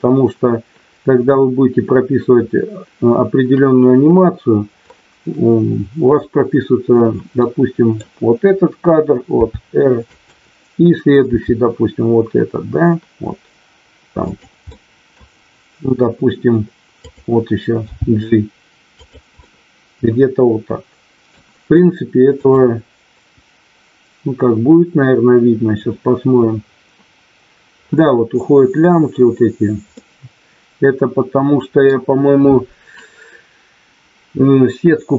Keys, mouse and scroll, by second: 7.4 middle click, 9.3 r, 10.0 click, 11.2 r, 14.7 middle click, 17.8 g, 19.0 click, 20.6 middle click, 25.8 click, 30.1-31.1 scroll up 1, 31.1-31.8 scroll up 1.